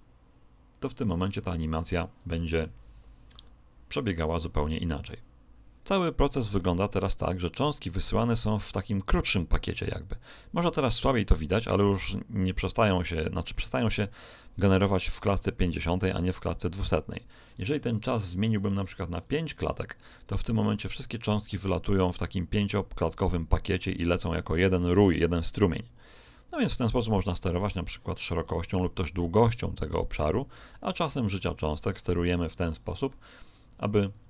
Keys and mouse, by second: 6.9 click, 15.1 click, 18.5 click, 20.5 click, 28.7 click, 31.5 click.